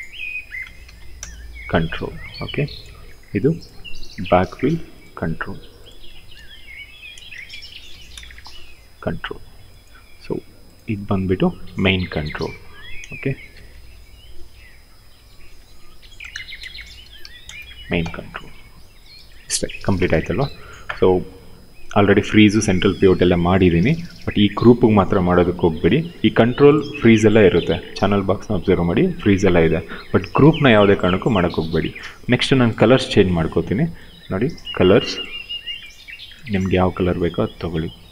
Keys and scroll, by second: 0.3 t, 0.6 l, 0.8 Return, 3.8 ctrl+c, 6.1 ctrl+v, 6.4-8.1 typing, 13.0-14.1 typing, 15.6-17.4 typing.